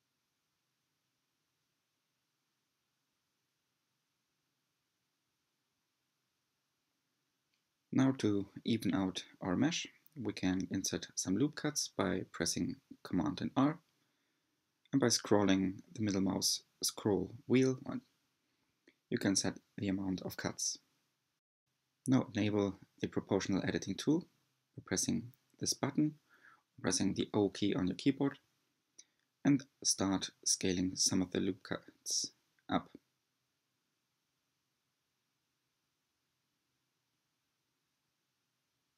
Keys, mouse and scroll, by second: 0.6 click, 0.9-1.9 middle drag, 1.9-2.9 drag, 4.2 s, 8.4 alt+z, 12.7 r, 19.5 2, 20.1 alt+click, 23.1 click, 24.7 s, 32.1 right click, 32.9 click, 33.3 click, 34.7 alt+click, 36.0 s.